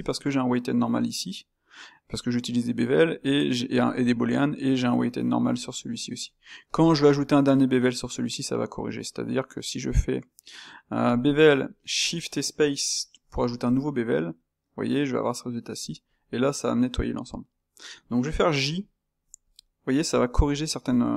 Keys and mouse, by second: 5.0-6.7 drag, 11.1 space, 16.9-20.0 middle drag.